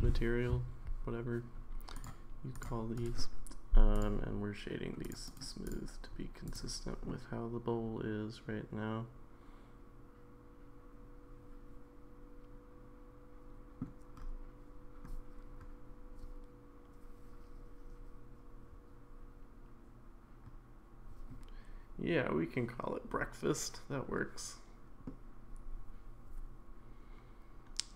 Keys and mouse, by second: 2.0 click, 3.1 right click, 5.0 click, 5.3 right click, 7.1-13.8 middle drag, 25.0-27.9 middle drag.